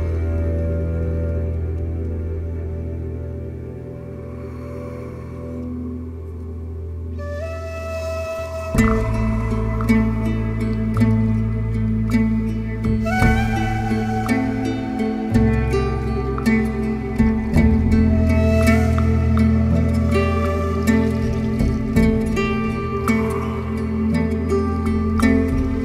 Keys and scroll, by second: 1.5 7, 13.9 4, 14.5 shift+i, 15.8 ctrl+z, 20.9 ctrl+z, 23.6 ctrl+z, 25.7 3.